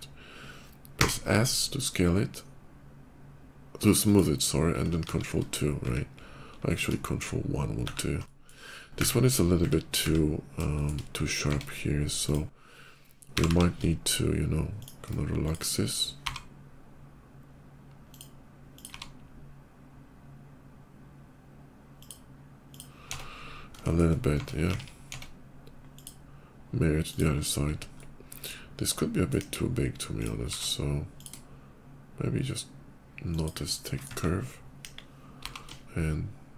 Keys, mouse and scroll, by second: 0.9 s, 3.9 click, 4.9 ctrl+2, 6.0 ctrl+2, 6.4 middle click, 7.7 ctrl+1, 8.0 middle click, 10.5 shift+middle click, 11.3 Tab, 12.1 click, 13.1 g, 13.8 g, 14.6 shift+click, 15.3 click, 17.0 g, 17.9 click, 18.5 click, 21.1 g, 21.8 click, 22.5 click, 23.0 Tab, 23.1 middle click, 23.6 shift+middle click, 24.1 Tab, 24.5 alt+x, 24.9 Tab, 25.1 Tab, 25.8 click, 26.9 click, 27.2 middle click, 27.8 middle click, 28.6 middle click, 29.3 KP_5, 30.0 click, 30.2 q, 30.8 click, 33.1 shift+click, 33.5 shift+middle click, 34.4 middle click, 34.6 KP_5, 35.1 g.